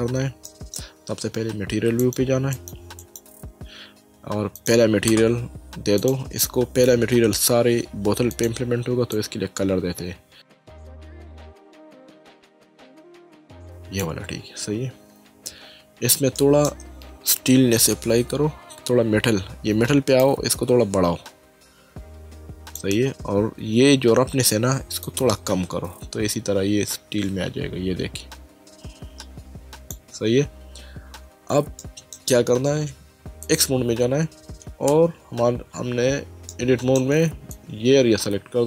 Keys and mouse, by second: 0.4 middle click, 2.0 click, 4.6 click, 6.0 click, 8.3 click, 13.3 click, 16.4 shift+middle click, 20.2 click, 25.0 click, 31.8 shift+middle click, 33.4 click, 34.9 Tab, 36.5 shift+middle click, 37.5 click.